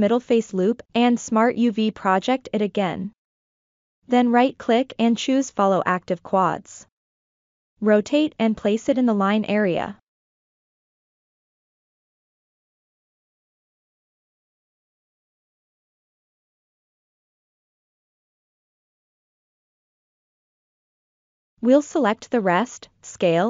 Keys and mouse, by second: 0.4 u, 3.9 right click, 5.6 r, 6.1 click, 8.5 g, 9.0-11.5 drag, 12.0-12.7 ctrl+middle drag, 12.9-13.3 ctrl+middle drag, 15.0 s, 15.4 click, 15.7-16.4 drag, 16.6 g, 17.0-17.8 drag, 18.8-19.6 ctrl+middle drag, 20.3 click, 20.7 a, 21.6 click, 21.9 click, 22.9-23.4 drag.